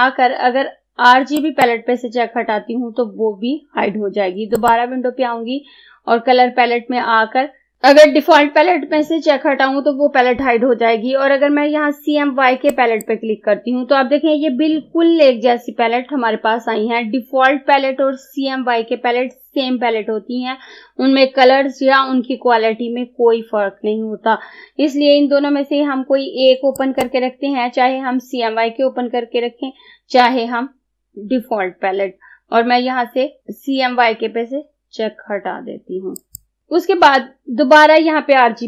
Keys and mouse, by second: 1.5 click, 4.6 click, 12.8 click, 26.8 click, 36.2 click.